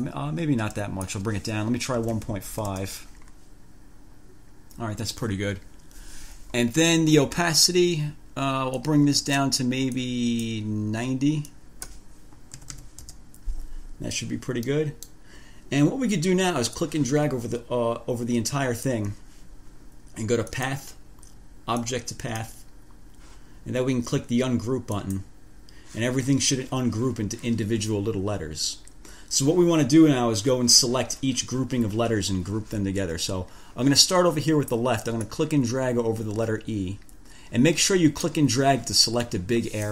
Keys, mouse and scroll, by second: 0.3-1.5 drag, 2.0-3.3 typing, 9.0 click, 10.1 click, 11.7 click, 12.6-13.5 typing, 14.9 click, 17.0-19.3 drag, 20.7 click, 22.0 click, 25.1 click, 35.5-38.7 drag, 39.5 click.